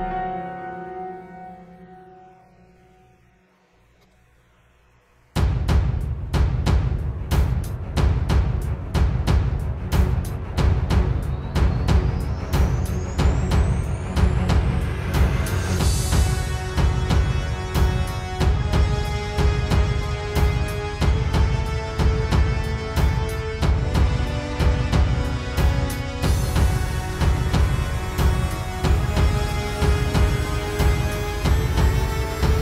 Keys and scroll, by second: 4.7 space, 5.3 alt+super+space, 10.2 space, 10.9 super+space, 11.5 super+space, 11.8 super+space, 25.1 super+z, 25.6 super+z, 29.9 space, 30.2 space, 30.6 space, 31.4 space.